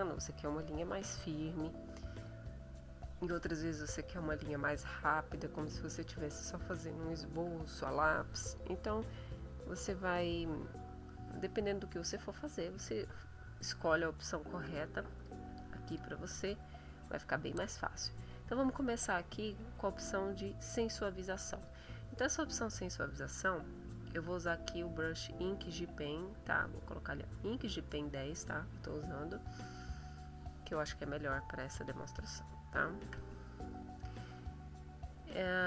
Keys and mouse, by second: 14.5 click, 15.1 click, 15.8 click, 31.7-33.2 shift+drag.